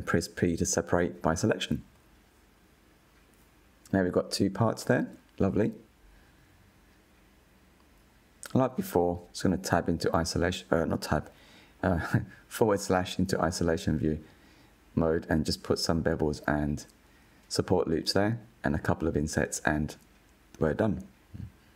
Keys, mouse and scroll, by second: 0.2 p, 3.0 Tab, 3.6 click, 4.1 click, 4.8 g, 5.7 click, 6.0 g, 8.7 /, 10.2 Tab, 11.2 2, 11.6 alt+click, 12.7 f, 14.0 ctrl+b, 15.9 middle click, 16.3 ctrl+r, 17.3-17.7 drag, 17.9 g, 18.6 middle drag, 18.8 3, 18.9 click, 19.2 i, 19.7 click, 20.2 Delete, 20.5 Tab, 20.6 click, 20.7-21.4 middle drag, 21.4 /, 21.6 click.